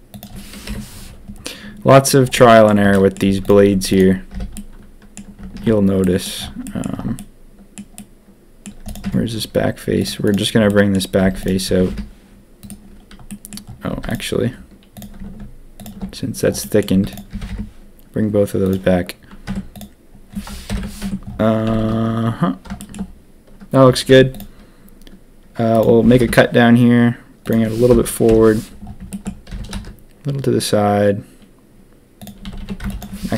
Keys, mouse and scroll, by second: 0.6 KP_7, 2.3 middle click, 2.9 middle click, 3.2 z, 3.6 Tab, 3.9 click, 4.3 h, 4.5 click, 5.5 ctrl+z, 6.0 drag, 6.1 click, 6.6 drag, 7.1 middle click, 7.9-8.6 middle drag, 8.8 click, 9.0 Tab, 10.6 middle click, 11.2 z, 11.6 g, 13.3 middle click, 13.9 z, 14.9 click, 15.7 alt+shift+click, 16.6 middle click, 17.1 z, 17.3 g, 19.4 Tab, 20.6 ctrl+KP_3, 21.0 Tab, 21.6 a, 21.8 a, 24.0 ctrl+r, 26.0 g, 28.2 ctrl+KP_1, 29.1 shift+click, 29.5 g, 32.4 a, 32.6 a, 32.8 b, 33.3 ctrl+KP_3.